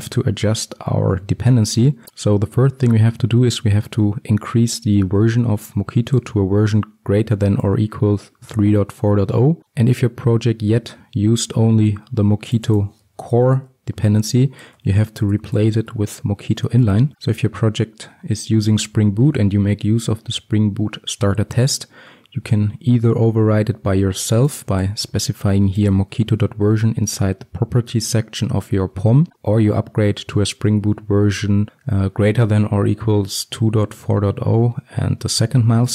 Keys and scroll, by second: 17.1 Escape.